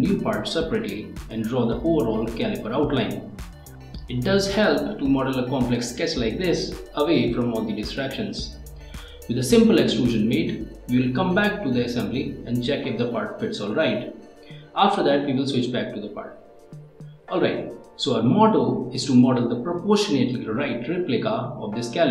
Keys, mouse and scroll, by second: 2.5 ctrl+Tab, 7.1 ctrl+Tab.